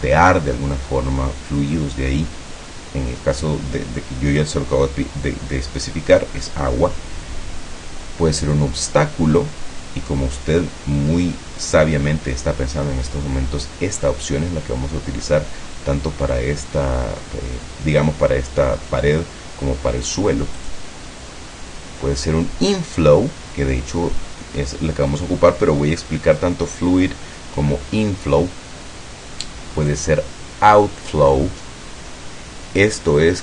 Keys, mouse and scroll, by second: 20.7 click.